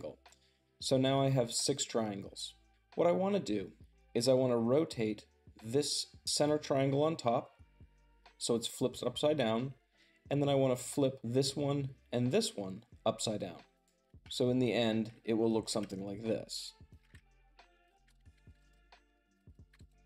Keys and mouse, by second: 14.0-15.5 shift+middle drag, 15.4 g, 16.7 ctrl+click, 17.0-19.8 typing, 17.8 ctrl+shift+click, 18.2 click, 19.3 super+drag.